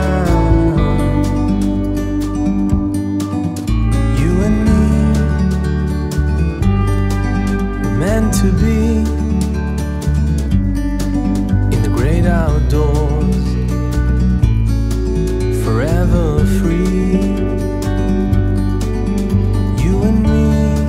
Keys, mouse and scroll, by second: 0.6 middle click, 1.0 g, 2.2 drag, 2.6-3.5 drag, 3.5 middle click, 4.0 g, 5.7 g, 9.4 scroll up 2, 9.6 middle click, 9.9 g, 11.2-11.6 middle drag, 11.6-12.0 scroll down 1, 12.2 KP_3, 13.0 scroll up 1, 13.2-14.3 middle drag, 14.3 shift+d, 16.7 g, 18.2 g, 20.4-20.8 middle drag.